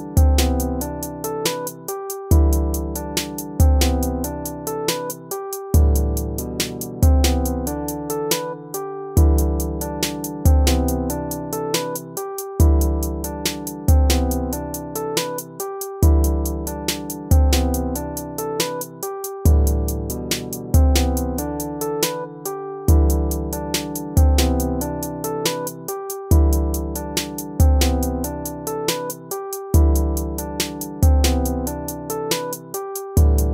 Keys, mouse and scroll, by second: 5.2 ctrl+-, 7.6 ctrl+-, 8.1 ctrl++, 10.3 ctrl++, 10.6 ctrl+-, 11.3 ctrl+-, 12.6 ctrl++, 13.0 ctrl++, 14.7 ctrl+-, 15.1 ctrl++, 18.9 ctrl+-, 19.4 ctrl++, 21.9 ctrl+z, 22.1 ctrl+-, 27.9 ctrl++, 30.7 ctrl+-, 31.0 ctrl+-, 31.6 ctrl+-, 32.0 ctrl+-.